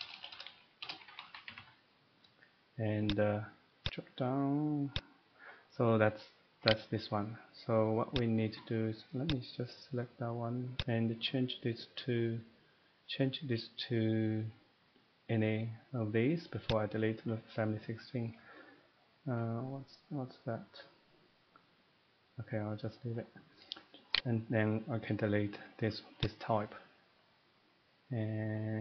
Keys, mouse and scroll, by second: 0.2-1.8 typing, 7.6 click, 7.6 right click, 8.1 click, 9.3 click, 10.8 click, 16.7 click, 24.1 right click, 26.5 click.